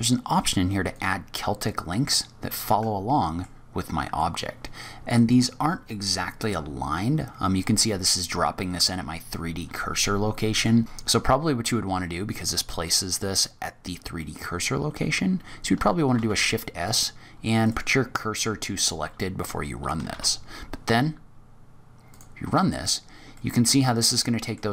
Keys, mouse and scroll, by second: 2.1-2.6 scroll down 3, 2.6 middle click, 3.7-4.1 scroll up 3, 4.1 middle click, 10.5 click, 12.8 click, 13.5-13.8 scroll down 2, 13.8-14.2 scroll up 2, 14.1 middle click, 15.9 shift+s, 20.0 shift+a, 23.2 middle click.